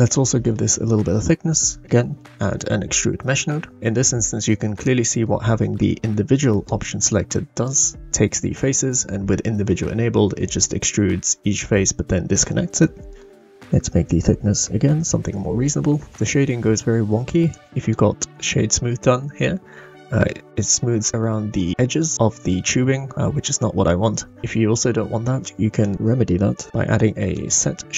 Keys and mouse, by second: 0.1-0.5 shift+middle drag, 1.6 shift+a, 4.7-5.2 middle drag, 6.5 click, 7.0 click, 7.6 click, 13.1 click, 14.0-15.2 drag, 17.5 click, 25.3 shift+a.